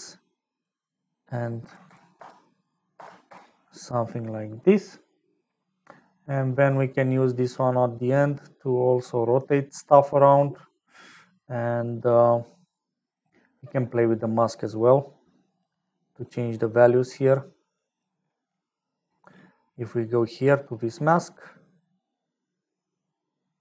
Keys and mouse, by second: 0.6-4.6 drag, 6.7 middle click, 8.2-10.0 drag, 15.1 click, 15.8 click, 16.4 click, 17.3 click, 18.8 click, 20.6 click, 21.6-23.6 shift+drag.